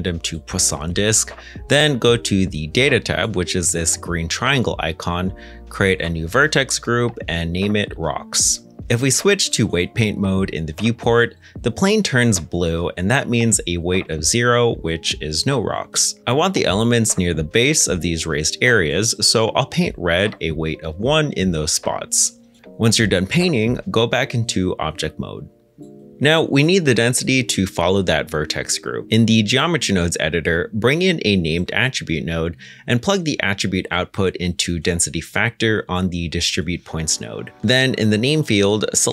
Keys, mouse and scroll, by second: 7.1-7.8 typing, 7.8 Return, 9.5 ctrl+Tab, 12.6 f, 15.3 middle click, 16.8 scroll down 1, 17.4 shift+middle click, 17.9-19.6 scroll down 1, 20.5 middle click, 22.8 middle click, 24.0 ctrl+Tab, 30.2 shift+a, 31.7-32.2 typing, 32.4 Return.